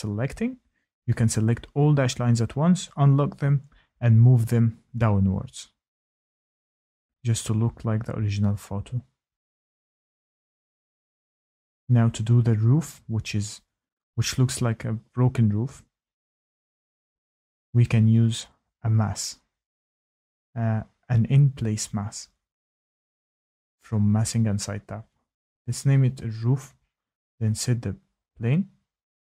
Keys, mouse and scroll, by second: 0.0 ctrl+click, 0.6 click, 5.8 click, 14.2-16.7 scroll, 16.7-19.4 scroll, 19.4 click, 21.0 click, 22.6-23.1 typing, 24.4 click, 26.1 click, 27.3-28.1 scroll.